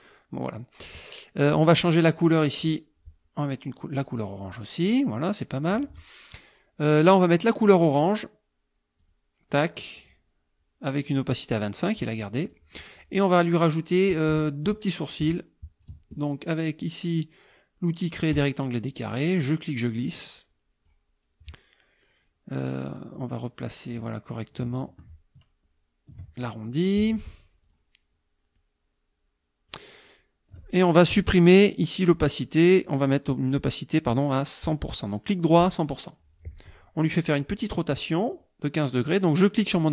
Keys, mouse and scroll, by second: 0.9 click, 1.5 click, 2.2 click, 4.0 click, 4.5 click, 5.3 middle click, 6.9 click, 9.0 click, 12.5 click, 18.3 click, 19.5-21.1 drag, 23.1-26.3 drag, 27.7 click, 28.6-29.9 drag, 34.7 right click, 35.6 click, 38.3 click.